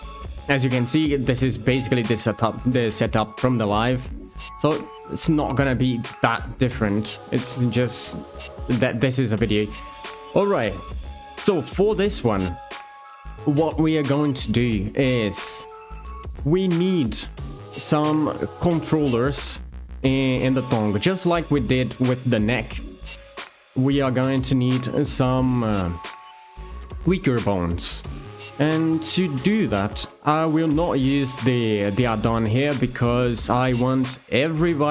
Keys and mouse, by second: 16.7 click, 17.9 shift+click.